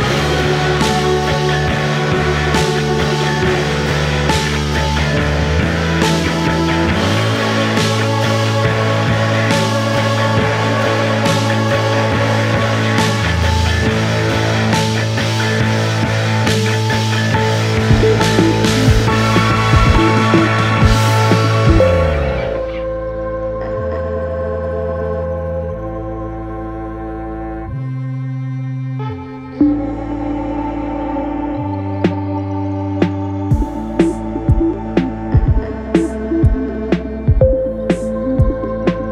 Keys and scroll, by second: 7.4 ctrl+d, 7.6 Escape, 36.5-38.3 typing.